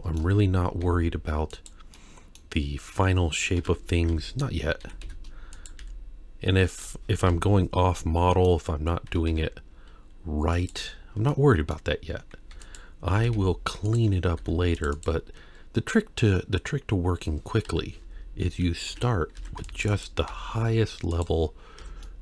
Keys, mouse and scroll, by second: 0.4-0.8 scroll up 1, 0.8 g, 1.9-2.4 middle drag, 3.6 KP_3, 4.1 Tab, 4.9 s, 5.8 g, 7.2 KP_4, 7.2 KP_1, 8.2 middle click, 9.1 s, 11.3 middle click, 12.5 3, 12.7 click, 13.2 g, 14.4 ctrl+r, 17.7 KP_3, 18.9 1, 19.4 alt+a, 19.6 c, 20.3 g, 21.8 Tab, 22.0-22.2 middle drag.